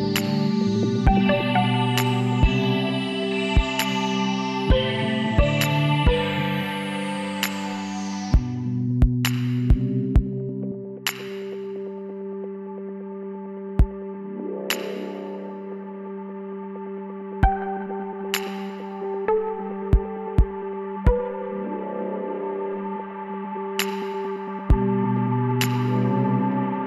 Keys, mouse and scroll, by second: 0.6 middle click, 1.9 middle click, 2.4 KP_1, 5.1 Tab, 6.1-7.2 middle drag, 7.7-9.1 middle drag, 9.1 shift+d, 11.6-13.2 drag, 15.2 r, 18.9-22.7 middle drag, 22.7 right click, 22.7 l, 23.5-25.0 middle drag.